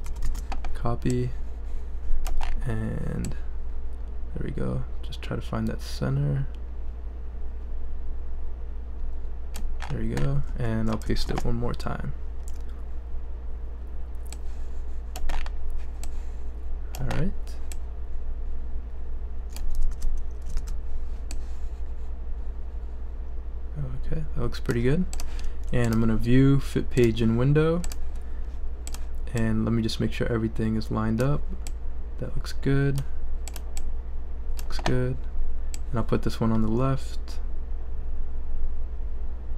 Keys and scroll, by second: 0.1 super+c, 0.2 super+v, 11.3 super+v, 19.9 super+z.